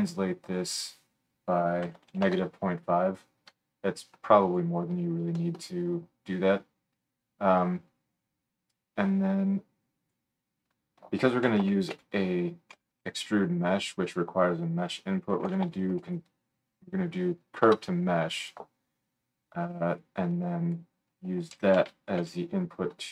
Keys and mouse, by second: 0.7-4.6 middle drag, 3.5 KP_Enter, 9.2-18.5 middle drag, 20.0-23.1 middle drag.